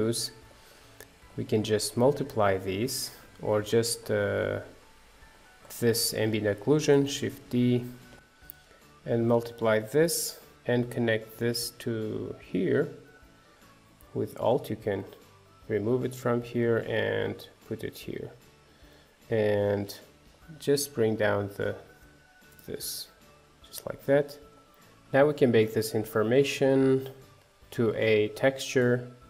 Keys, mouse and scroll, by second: 3.2-7.2 drag, 7.2 shift+d, 8.3 shift+d, 8.7 click, 9.6 shift+d, 10.7-12.2 drag, 13.5 alt+click, 22.2 click, 23.8 scroll down 3, 24.1 middle click, 24.7 scroll down 1, 28.4 click.